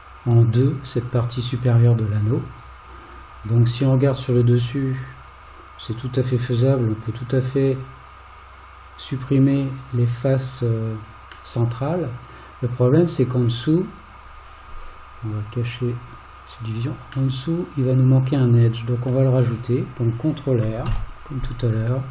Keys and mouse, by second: 4.1-6.3 middle drag, 11.6-13.4 middle drag, 17.4-19.1 middle drag, 20.9 ctrl+r.